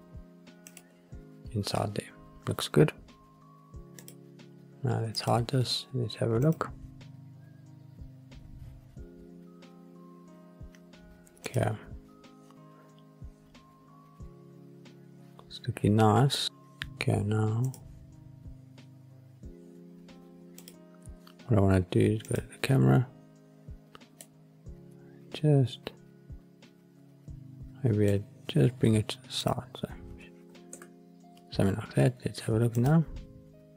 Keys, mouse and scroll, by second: 0.6 click, 1.1 scroll down 2, 2.2-3.4 scroll down 1, 3.9 click, 5.0 click, 7.6 click, 11.3 click, 16.4 click, 17.7 click, 20.5 click, 22.2 click, 24.1-28.0 middle drag, 29.3 click, 30.6 ctrl+alt+KP_0.